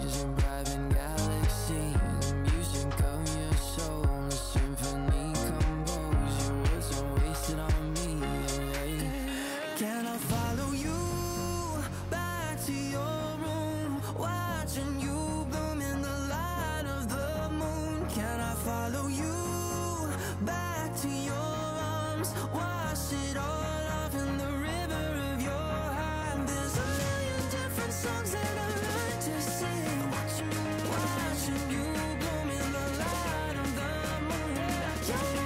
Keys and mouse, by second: 5.2 shift+click, 5.4 shift+click, 5.9 click, 6.4 Return, 7.0 click, 7.2 ctrl+click, 7.8 click, 14.2 click, 14.7 ctrl+j, 15.9 click, 17.6 click, 22.0 KP_2, 22.1 Return, 22.7 click, 27.8 click, 28.5 click, 29.5 alt+shift+click, 29.8 alt+shift+click, 30.3 shift+click, 31.2 click, 32.1 click, 34.1 Return, 34.6 ctrl+[, 35.2 ctrl+].